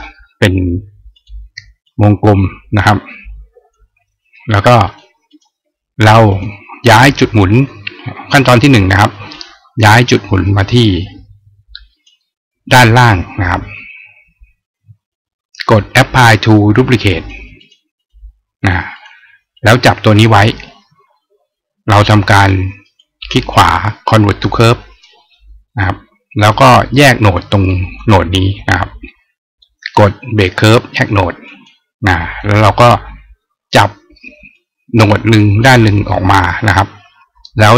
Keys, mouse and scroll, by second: 0.9 click, 1.6-3.5 drag, 4.6 click, 5.1 click, 6.1 click, 9.1-11.9 drag, 16.9 click, 17.3 click, 17.7 click, 18.8 click, 19.3 click, 22.7 right click, 24.4 click, 26.3 click, 27.5-27.8 drag, 31.2 click, 34.3-35.4 drag.